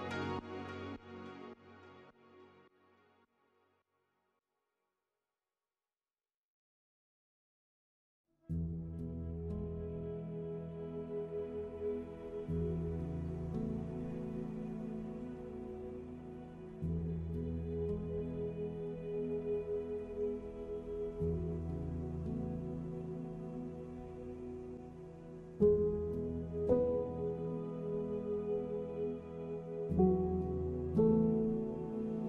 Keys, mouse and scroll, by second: 11.2 n, 11.4 middle click, 11.8 shift+a, 13.4 click, 13.8 click, 15.4 click, 16.9 click, 17.6 r, 19.8 middle click, 19.9 middle click, 20.4 Tab, 20.6 middle click, 21.1 scroll up 1, 21.3 middle click, 21.8 e, 23.2 Tab, 23.7 click, 24.0 middle click, 24.5 s, 24.9 middle click, 25.5 KP_1, 26.1 KP_3, 27.0 click, 27.5 middle click, 28.7 click, 29.7 middle click, 30.3 middle click, 30.7 s, 31.0 middle click, 32.0 click.